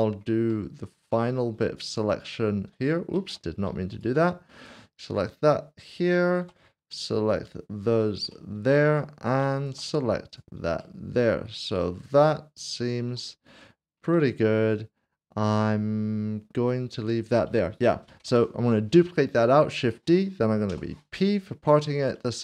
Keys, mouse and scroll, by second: 0.5 shift+middle click, 1.8 ctrl+click, 3.1 ctrl+z, 3.9 shift+click, 4.6 ctrl+click, 6.3 shift+click, 7.8 ctrl+click, 8.3 shift+middle click, 11.0 middle click, 19.8 right click, 20.7 p, 21.9 click.